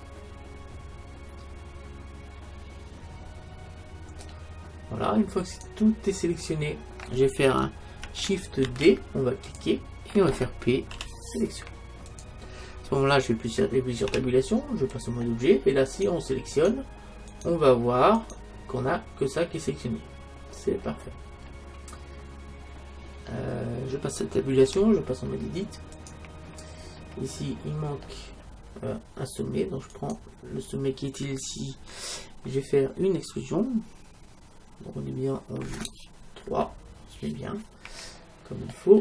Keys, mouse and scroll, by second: 5.7-7.3 right drag, 6.8 middle click, 7.3 click, 7.6-8.7 middle drag, 8.7 shift+d, 9.6-11.5 drag, 11.0 p, 14.1 Tab, 15.9-20.1 right drag, 20.6-25.5 middle drag, 24.7 Tab, 26.8-28.2 middle drag, 29.9-31.9 right drag, 36.5 KP_3, 38.1 middle click.